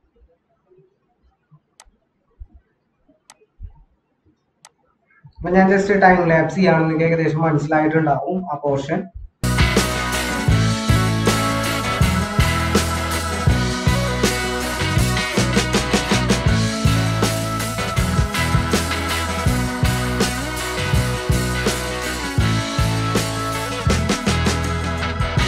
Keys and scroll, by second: 6.3 ctrl+-.